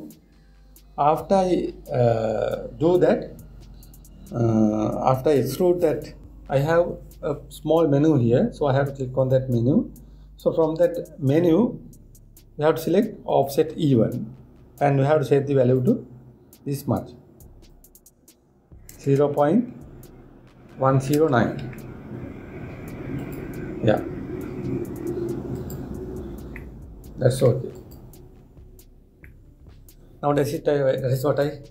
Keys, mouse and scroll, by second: 9.9-13.0 drag, 14.0 click, 16.3-19.4 drag, 26.2 click, 27.2-28.4 middle drag, 28.4 click, 29.9-31.7 middle drag.